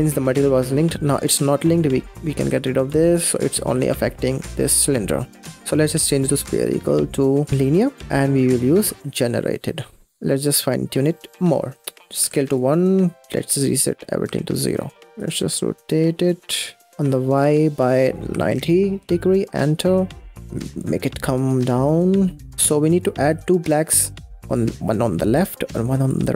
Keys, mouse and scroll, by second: 1.9 click, 2.3 x, 2.8 drag, 3.6 x, 5.1 middle click, 5.5-5.9 scroll up 6, 5.9-7.5 drag, 7.9 scroll down 4, 8.0-8.8 scroll up 4, 8.8 click, 10.2-10.7 scroll up 3, 10.7-11.8 middle drag, 11.8 click, 13.1-14.5 drag, 15.1-20.3 drag, 20.3-22.3 shift+drag, 22.5 middle drag, 22.7-23.2 scroll up 4, 23.2-25.9 drag.